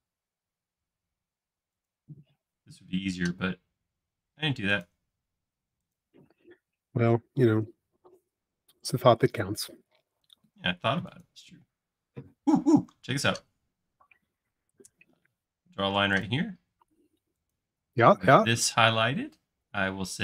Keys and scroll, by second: 7.9 space, 8.3 l, 13.1 i, 14.8-15.4 typing, 17.9 space.